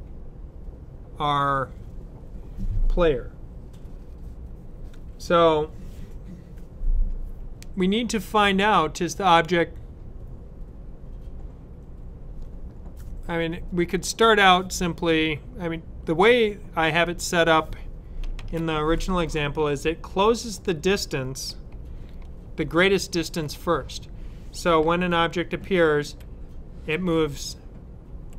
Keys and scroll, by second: 18.2 s, 24.9 Up.